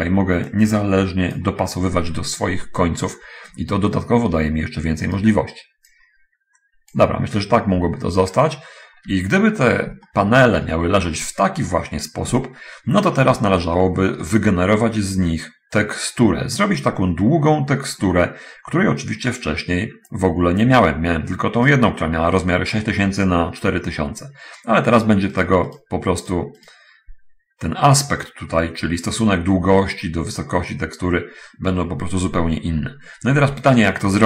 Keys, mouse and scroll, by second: 0.8 click, 2.7-3.4 scroll down 1, 3.4-4.0 scroll up 2, 4.0 shift+scroll down 1, 5.4 right click, 5.9-7.3 drag, 7.3-8.0 scroll down 1, 9.4 Tab, 9.8-10.1 scroll down 1, 10.3 shift+middle click, 12.6 a, 14.0 shift+middle click, 22.0 right click, 25.2-25.8 right drag, 26.0 right click, 26.6 right click, 33.7 a.